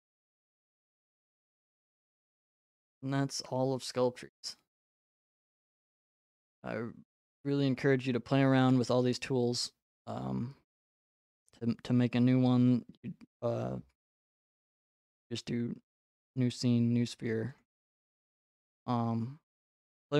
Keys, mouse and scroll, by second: 5.3 click, 7.2-7.8 scroll, 7.8-9.3 scroll, 14.7 click, 16.4 click, 17.6 click, 18.6-19.6 scroll.